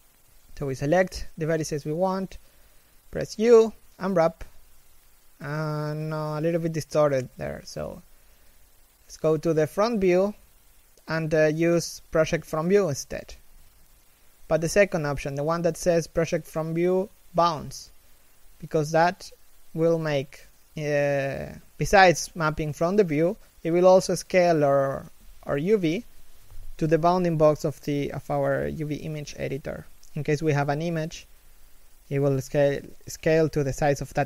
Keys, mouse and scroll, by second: 3.2 u, 7.0 u, 7.5 KP_1, 10.2 u, 15.2 scroll up 1, 17.2 middle click, 18.3 1.